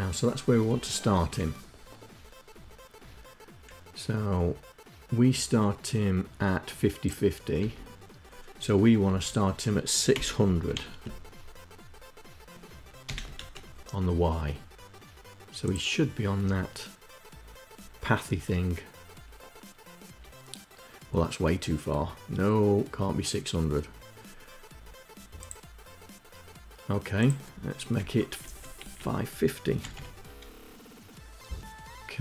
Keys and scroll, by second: 7.3 Left, 8.7 Down, 9.9 Delete, 10.3 6, 12.7 0, 12.9 Down, 13.1 Up, 27.6 Left, 28.0 Delete, 28.4 Delete, 29.4 5.